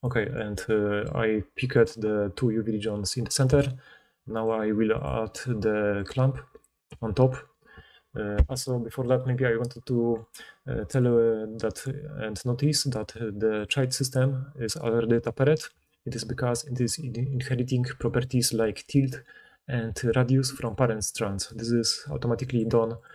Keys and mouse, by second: 0.0-0.6 right drag, 1.7-5.0 middle drag, 6.0-10.9 middle drag, 13.6 click, 18.1-22.5 drag.